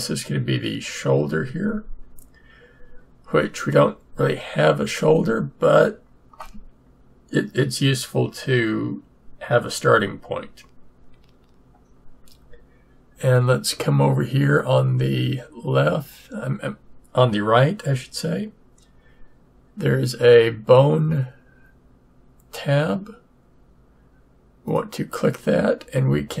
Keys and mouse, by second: 24.6-26.4 drag.